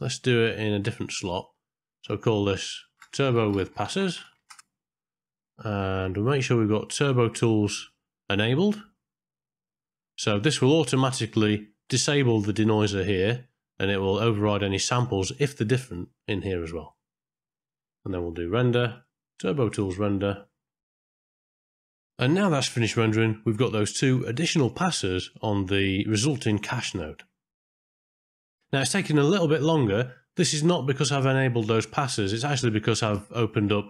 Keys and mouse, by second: 1.7 click, 2.0-4.3 drag, 4.3 s, 7.8 middle click, 8.9-10.2 middle drag, 10.6 middle click, 13.4 middle click, 17.0 middle click, 19.0-20.8 drag, 26.1 middle click.